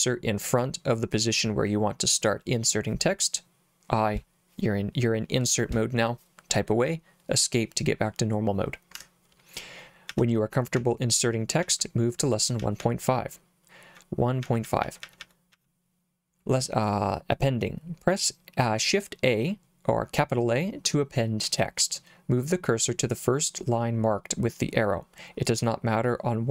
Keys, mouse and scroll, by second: 9.0 Escape, 10.1-12.8 typing, 14.4-15.6 typing.